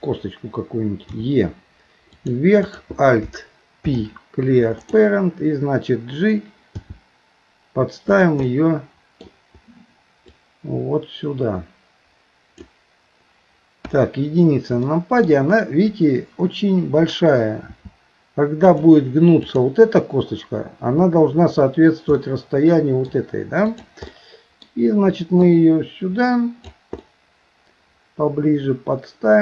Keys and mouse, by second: 1.1 e, 2.7 click, 3.8 alt+p, 6.7 g, 8.5 middle click, 10.4-13.9 drag, 13.9 KP_1, 14.9 shift+middle click, 17.7 s, 19.4 click, 22.2 middle click, 23.7 click, 25.5-26.7 drag, 27.1-29.4 middle drag.